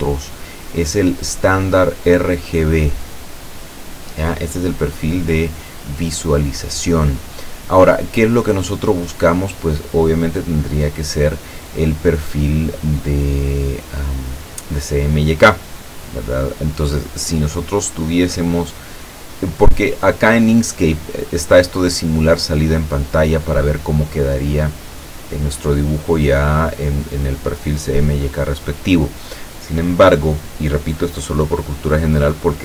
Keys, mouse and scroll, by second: 7.6 click, 8.5-10.2 scroll down 6, 10.5 scroll down 1, 14.4 click, 23.0-24.3 drag, 26.4-27.6 drag.